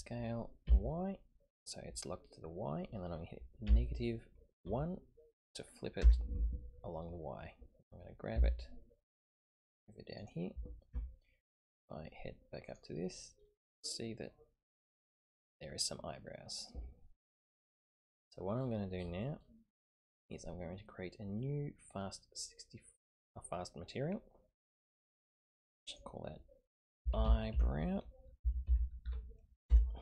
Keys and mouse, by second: 8.3 g, 10.9 Tab, 12.6 click, 13.8-17.5 middle drag, 23.3 click, 25.7 click, 26.3-30.0 drag, 27.2 e.